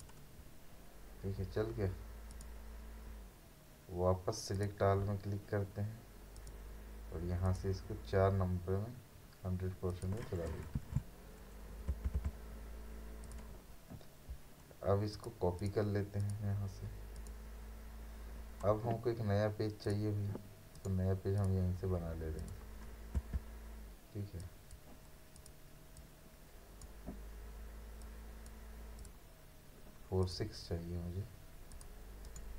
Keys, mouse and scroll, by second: 2.3 click, 4.6 click, 8.8-9.9 scroll up 1, 9.9 click, 10.8 1, 13.2 click, 19.8 click, 20.8 right click, 21.4 click, 24.4-29.0 drag, 32.2 right click.